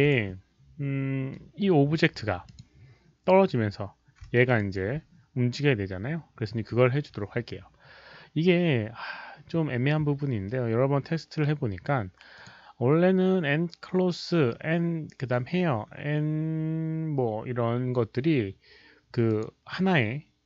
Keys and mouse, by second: 2.4 alt+click, 4.3 alt+middle click, 4.3 alt+click, 4.5 alt+right click, 5.7 alt+middle click, 5.7 alt+click, 9.8 alt+right click, 9.8 alt+middle click, 9.8 alt+click, 11.3 alt+right click, 12.3 click, 12.3 alt+middle click, 15.2 click, 15.2 alt+right click, 19.2 click.